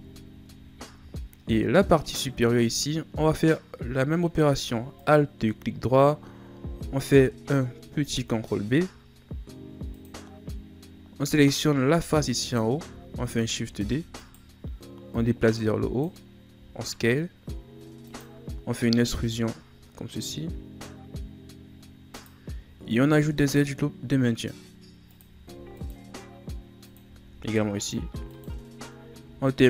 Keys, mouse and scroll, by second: 0.5 Tab, 1.1-2.1 shift+scroll up 6, 2.1 middle click, 2.6-3.2 scroll up 2, 3.2 scroll down 1, 3.5-4.9 middle drag, 4.9 alt+right click, 7.9 ctrl+b, 11.7-12.4 scroll up 1, 12.4 alt+right click, 13.5 shift+d, 15.1-16.5 drag, 16.5 s, 23.1 ctrl+r, 25.4 ctrl+r, 29.4 alt+right click.